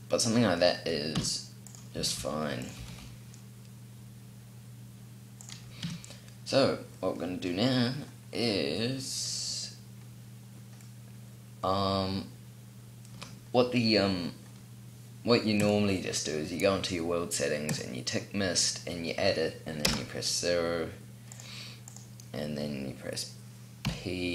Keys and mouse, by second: 0.5-2.3 middle drag, 1.1 s, 1.8 s, 2.8 g, 5.6 click, 5.8 a, 6.3 click, 7.0 click, 10.4-11.5 middle drag, 15.5-16.5 drag, 15.5-16.5 middle drag, 19.7 KP_0, 23.7 p.